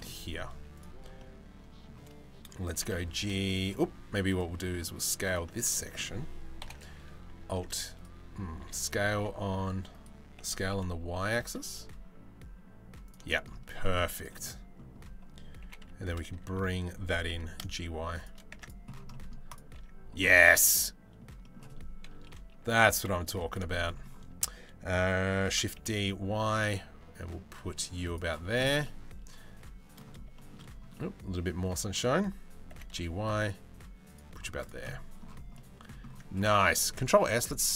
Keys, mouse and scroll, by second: 0.8-1.5 middle drag, 2.3 g, 3.4 Tab, 3.8 Tab, 3.9 click, 4.4 Tab, 4.4 middle click, 6.2 ctrl+l, 7.7 click, 8.2 s, 10.0 s, 12.9 shift+middle click, 13.6 Tab, 13.7 click, 14.1 middle click, 15.2 g, 18.1 Tab, 18.2 click, 19.4 Tab, 20.0 middle click, 21.0 middle click, 21.6 KP_3, 22.2 KP_1, 22.6 KP_3, 23.3 shift+middle click, 23.7 middle click, 25.1 shift+d, 28.4-29.6 middle drag, 29.9-30.8 shift+middle drag, 31.1 middle click, 32.3 g, 34.4-35.5 middle drag, 36.6 ctrl+s.